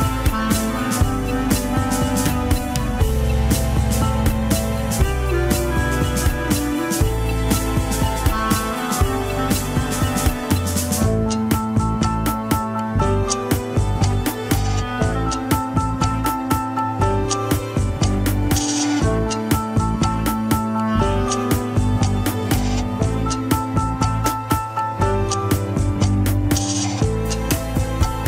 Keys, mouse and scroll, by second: 0.8 KP_1, 1.5-2.0 shift+middle drag, 2.0-2.5 scroll up 5, 2.5 ctrl+Tab, 2.9 scroll up 3, 4.2 KP_3, 4.5 scroll up 2, 4.7 alt+z, 4.9-8.2 shift+middle drag, 8.2 KP_1, 8.4 scroll down 1, 8.6 alt+z, 9.0-10.4 shift+middle drag, 10.4 scroll down 4, 10.7-12.9 shift+middle drag, 18.2-20.2 middle drag, 26.0 KP_1, 27.4 ctrl+s.